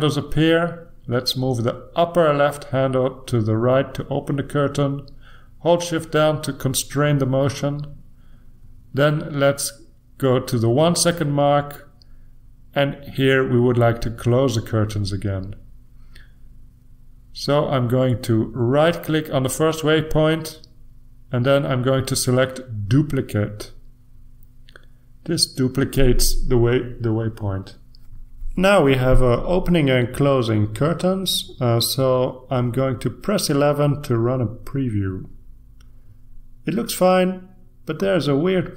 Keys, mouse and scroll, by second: 1.0-3.3 shift+drag, 4.4-5.6 shift+drag, 8.9 click, 12.1-15.5 shift+drag, 21.2 click, 23.8 click, 31.0 F11, 34.4 click, 35.2 ctrl+r, 36.9 click.